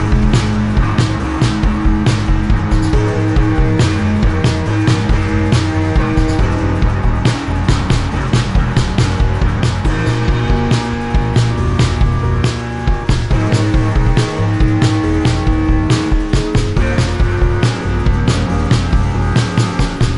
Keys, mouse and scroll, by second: 2.4 Delete, 3.5 click, 5.3 click, 10.5 click, 11.1 click, 12.4 click, 14.2 click, 15.5 click, 15.6 click, 16.2 click, 17.8 click, 18.8 click.